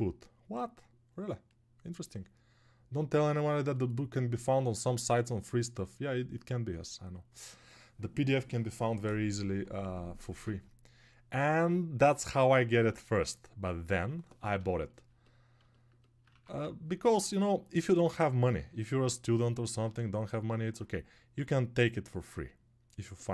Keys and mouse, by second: 16.6 ctrl+1.